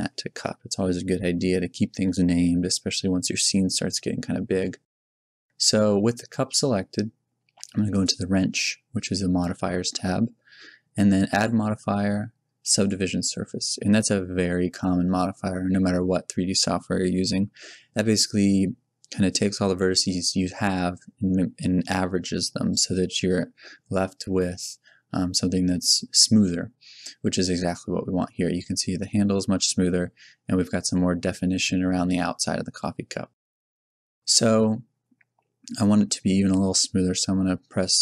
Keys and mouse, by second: 7.9-9.7 drag, 11.3-12.8 drag, 13.7-15.6 middle drag, 24.5-26.4 middle drag, 29.0-35.9 middle drag.